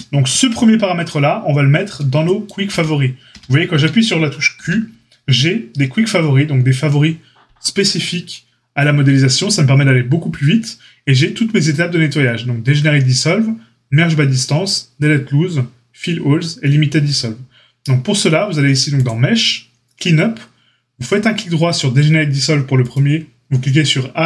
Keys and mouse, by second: 2.7 Tab, 3.3 Tab, 4.6 q.